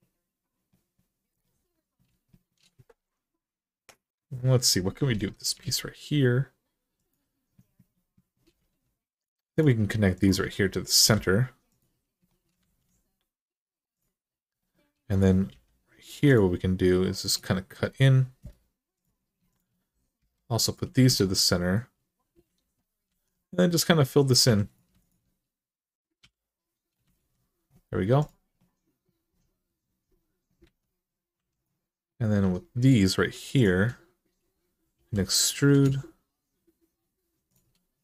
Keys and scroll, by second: 5.4 alt+z, 8.4 alt+z, 10.8 m, 12.4 alt+z, 15.3 k, 18.2 Return, 20.0 m, 21.0 alt+z, 22.4 alt+z, 22.9 alt+z, 24.2 2, 26.0 f, 27.0 alt+z, 30.4 alt+z, 31.1 2, 34.7 e, 37.8 1.